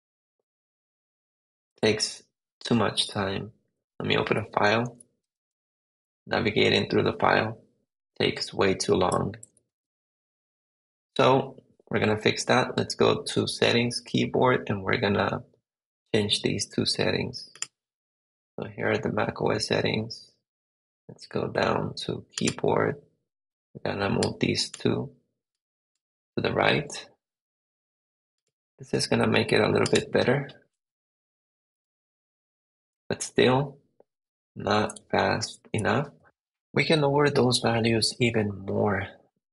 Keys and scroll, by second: 0.2 Down, 2.2 Up, 3.5 Down, 4.3 Down, 4.8 Up, 5.1 Return, 6.0 Down, 9.7 super+Tab, 30.9 Down, 31.8 Up, 32.9 Right, 34.9 Right, 35.1 Left, 36.1 super+Tab.